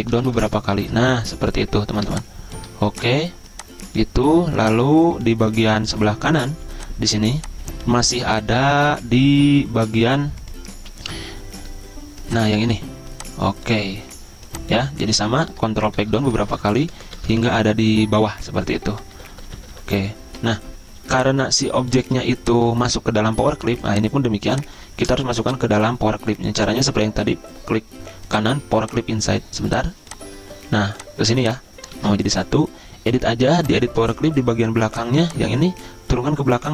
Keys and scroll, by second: 16.2 ctrl+Page_Down, 19.2 ctrl+Page_Up, 25.4 z, 32.2 ctrl+z.